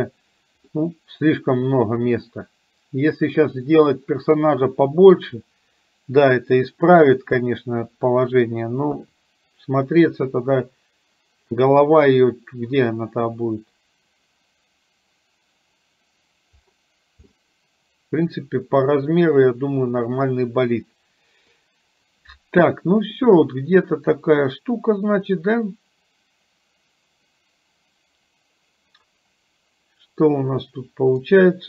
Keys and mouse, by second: 0.9-3.4 middle drag, 6.6 middle click, 8.9 KP_3, 17.4-21.6 middle drag, 23.2-31.2 middle drag.